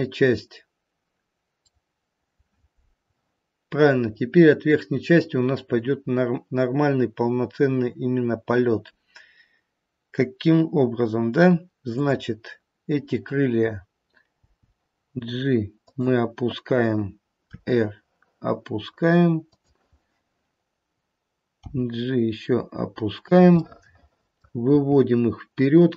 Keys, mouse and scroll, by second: 1.4 middle click, 4.0-4.4 scroll up 1, 5.8-6.9 scroll down 2, 11.9 click, 14.4 g, 17.5 r, 21.6 g, 23.6 middle click, 24.8 g.